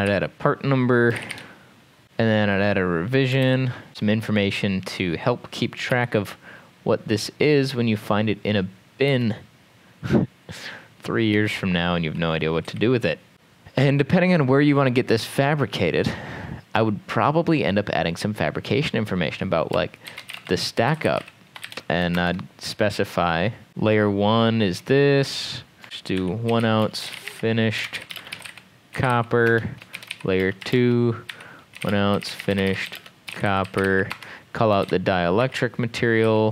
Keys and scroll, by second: 0.0-1.8 typing, 2.0 ctrl+s, 3.5 ctrl+d, 5.9 m, 9.1 m, 11.4 m, 12.7-13.3 typing, 13.3 ctrl+s, 19.8-22.1 typing, 22.3 shift+Return, 23.4-24.2 typing, 25.6-36.5 typing.